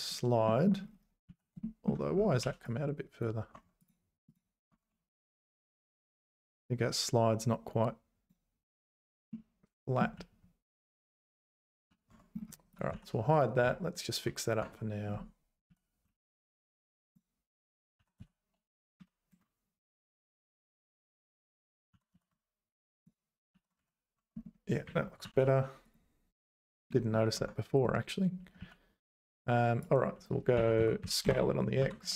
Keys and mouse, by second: 0.6 shift+click, 1.3 z, 1.8 shift+click, 2.4 1, 2.8 click, 3.5 Tab, 4.7 Tab, 5.2 1, 6.1-8.3 drag, 9.3 middle click, 10.1 z, 10.4 z, 12.1 Tab, 12.9 h, 13.3 click, 13.6 `, 14.6 Tab, 15.7 z, 16.1 1, 16.5 click, 18.0 s, 20.6 click, 21.9 g, 23.5 ctrl+s, 23.8 z, 24.2 Tab, 25.2 alt+h, 25.9 click, 27.3 Tab, 28.6 z, 29.9 click, 30.6 s, 31.8 g.